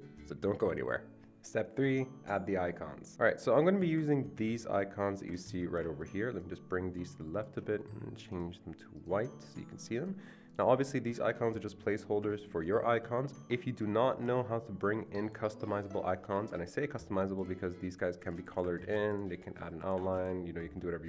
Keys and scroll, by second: 4.4 ctrl+v, 9.5 ctrl+v, 18.8 ctrl+z, 20.2 ctrl+z.